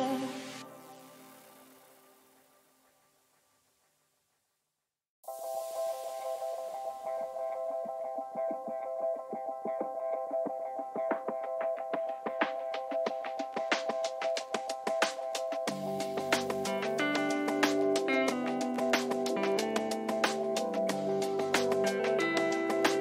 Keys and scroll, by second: 0.0 Down, 1.7 Up, 3.1 ctrl++, 7.7 Down, 9.2 Up, 10.0 Down, 10.5 ctrl+-, 19.0 Down.